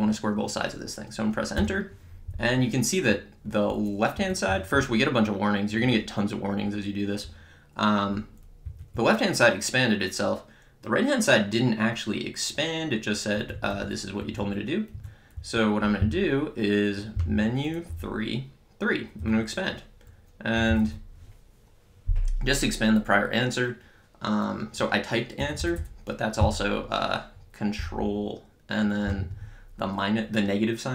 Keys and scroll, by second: 1.6 Return, 4.2 Up, 8.7 Left, 9.0 Right, 15.4 Down, 17.2 Menu, 17.9 3, 20.4-21.4 typing, 25.5 BackSpace.